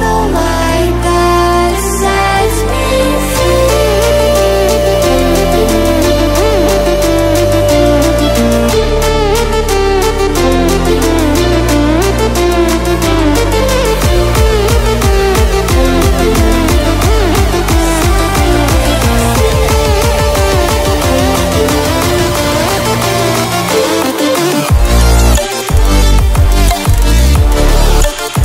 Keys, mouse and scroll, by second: 0.7 ctrl+w, 2.3 ctrl+w, 2.9 click, 6.4 ctrl+alt+scroll down 1, 8.6 click, 10.3 ctrl+w, 12.5 ctrl+w, 13.0-28.4 drag.